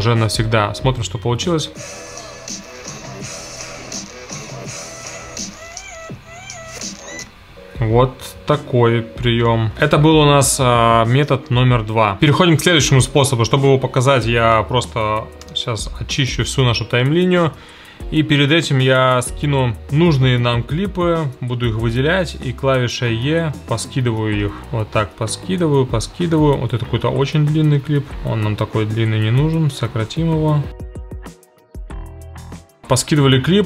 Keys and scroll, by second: 1.5 space, 7.2 space, 15.5 BackSpace, 21.5 e, 31.3-32.9 typing.